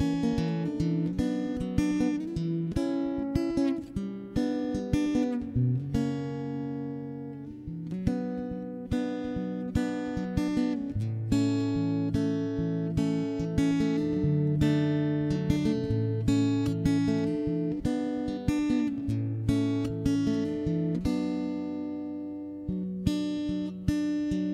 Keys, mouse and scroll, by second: 0.2 a, 0.4 ctrl+Tab, 1.1 middle click, 1.6 middle click, 2.3 shift+space, 2.8 click, 4.3 n, 4.4 t, 5.2 ctrl+KP_1, 6.1-7.1 middle drag, 7.1 n, 7.1 t, 7.3 n, 7.3 t, 7.5-9.1 drag, 7.7-9.1 right drag, 9.1 Tab, 10.4 click, 10.4 shift+h, 11.5 ctrl+Tab, 11.5 shift+h, 11.6 ctrl+Tab, 12.1 shift+h, 12.6 Tab, 13.1 right click, 13.3 click, 13.7 click, 14.0 middle click, 14.7 scroll up 1, 14.9 middle click, 15.9 ctrl+KP_1, 16.3 ctrl+space, 18.1 right click, 18.1 click, 18.1 shift+space, 18.5 middle click, 18.6 ctrl+KP_3, 18.7 middle click, 18.8 middle click, 19.2 click, 19.7 ctrl+,, 19.9 r, 20.9 ctrl+Tab, 21.1 c, 21.8 r, 24.2 middle click.